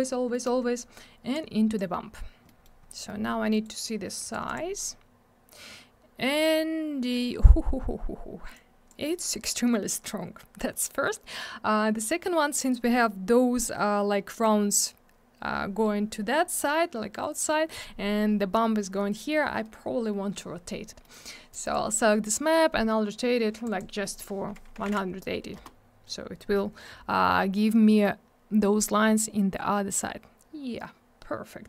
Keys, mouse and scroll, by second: 0.3 middle click, 0.4 middle click, 0.5-0.9 scroll up 1, 1.3 click, 2.4 middle click, 2.6 middle click, 2.8 scroll down 1, 3.0 middle click, 3.2 middle click, 3.5 right click, 3.6 right click, 4.2 click, 4.3 click, 4.4 click, 4.5 click, 7.1-8.3 scroll up 1, 8.5 click, 9.8-10.4 scroll down 1, 21.0 middle click, 21.1 middle click, 21.5 click, 21.6 double click, 21.7 click, 21.7 click, 23.7 click, 23.8 click, 24.8 1, 25.6 Return, 28.3-28.6 scroll up 1, 29.0-29.8 scroll down 1.